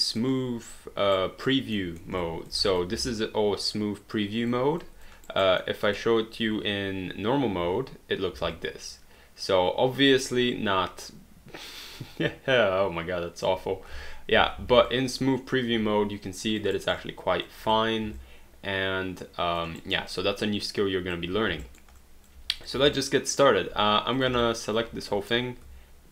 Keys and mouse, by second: 1.1 alt+right click, 1.9 alt+middle click, 2.2 alt+click, 3.2 alt+click, 4.8 alt+click, 5.3 alt+right click, 5.7 alt+middle click, 7.7 1, 8.5 alt+click, 13.9 3, 14.6 alt+d, 14.9 alt+click, 16.8 alt+right click, 17.0 alt+click, 18.2 alt+click, 19.8 alt+right click, 20.1 alt+click, 21.7 alt+right click, 22.0 alt+click, 23.0 alt+right click, 24.2 click, 24.5 alt+click.